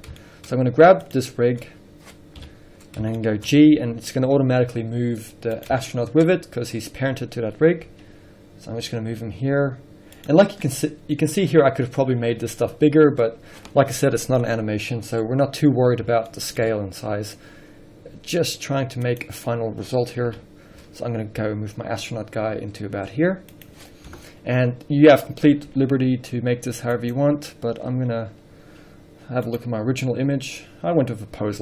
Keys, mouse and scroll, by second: 0.7-1.4 scroll up 1, 1.4 click, 1.7 scroll down 1, 2.6 KP_1, 3.4-5.9 shift+middle drag, 4.1 g, 5.9 click, 6.1-10.5 shift+middle drag, 6.5-8.1 scroll up 2, 8.1 g, 10.5 click, 10.7 scroll down 2, 10.9-19.4 middle drag, 11.5 scroll up 1, 16.9 scroll up 1, 17.7 s, 19.4 click, 20.5 KP_3, 21.7 g, 23.9 click, 24.3 KP_0, 25.0-26.0 scroll up 1, 26.0 g, 27.3 click.